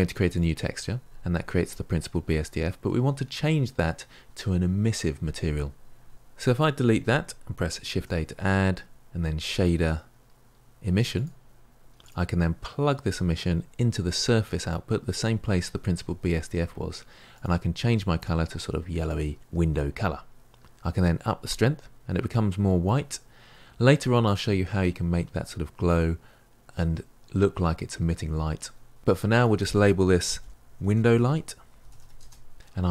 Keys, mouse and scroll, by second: 0.3-6.3 drag, 7.0 Delete, 9.0 shift+a, 14.4 click, 18.1 click, 21.1-32.1 drag.